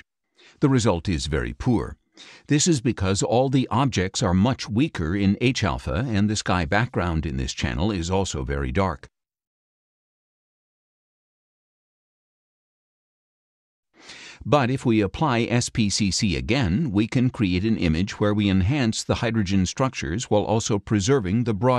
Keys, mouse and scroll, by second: 1.9 click, 3.1-3.7 scroll down 3, 4.3-5.8 middle drag, 8.6 scroll down 2, 10.1 scroll up 2, 11.0 scroll down 1, 11.7 scroll up 1, 14.7 click, 16.8 click.